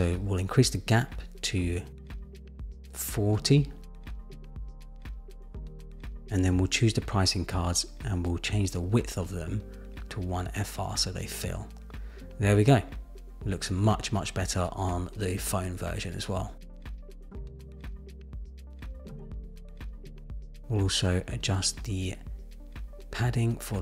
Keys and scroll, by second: 0.2 shift+Up, 1.8 shift+Down, 15.4 super+-.